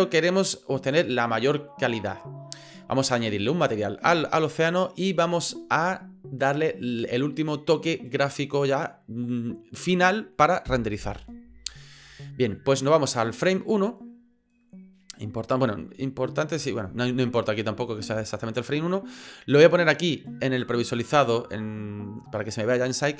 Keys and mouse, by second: 17.6 middle click, 18.3 shift+middle click, 21.4 click.